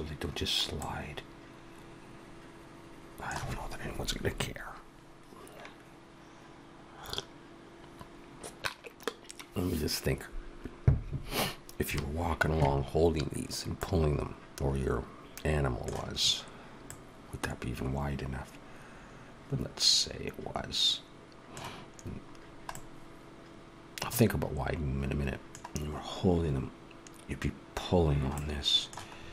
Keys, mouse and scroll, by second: 0.6 middle click, 13.6 middle click, 16.7 middle click, 22.1-22.5 scroll down 2, 22.6 middle click, 28.2 middle click, 29.0-29.3 scroll up 4.